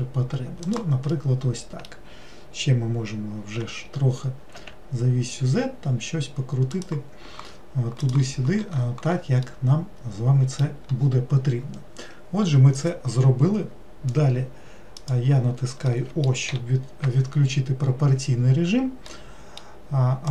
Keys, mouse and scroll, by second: 1.1-3.6 middle drag, 3.6 r, 9.5-12.5 middle drag, 15.0 click, 15.9 middle click, 16.5 o, 19.1-20.3 middle drag.